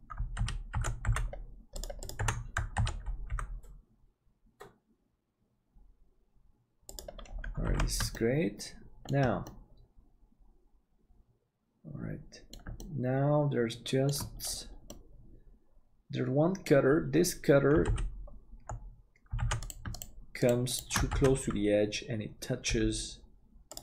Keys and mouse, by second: 0.4 alt+z, 0.7 alt+a, 1.0 c, 2.8 alt+z, 3.3 g, 7.6 alt+a, 8.1 middle click, 9.5-12.5 middle drag, 12.8-14.1 shift+middle drag, 14.9-16.0 middle drag, 16.0 click, 17.9 alt+z, 19.4 alt+a, 21.1 alt+z, 22.6 g.